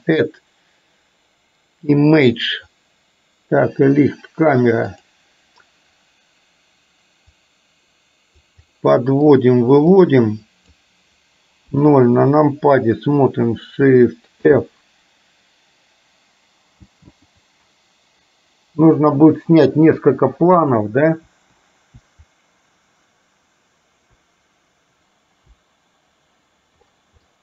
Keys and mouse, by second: 7.5-8.6 drag, 8.9 middle click, 10.2 click, 11.7 KP_0, 14.5 shift+f.